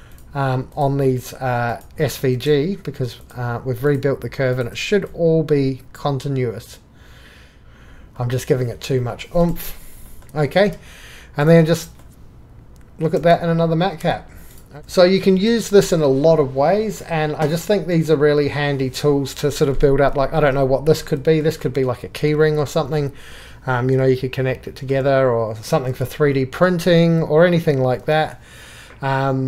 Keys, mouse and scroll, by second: 0.7-1.6 shift+middle drag, 3.2-3.8 shift+middle drag, 7.4 click, 11.1 middle click, 13.2 alt+q, 14.6 click, 15.3-15.7 drag, 22.2 middle click, 22.4-22.8 shift+middle drag, 22.9-24.6 middle drag, 25.9 alt+q.